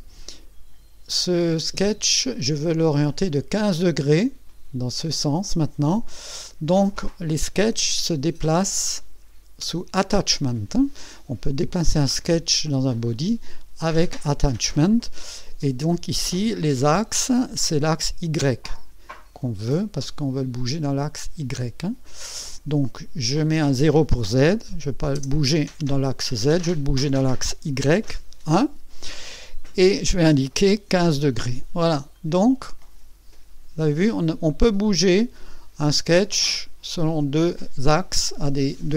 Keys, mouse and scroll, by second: 0.2-2.6 drag, 2.7-3.4 drag, 9.0 click, 16.3 click, 19.4-20.7 drag, 21.5 click, 23.6 click, 25.1 KP_0, 26.7 click, 28.1 KP_1, 30.0 click, 30.9 KP_1, 31.1 KP_5, 32.1-34.0 drag, 34.5-35.5 drag.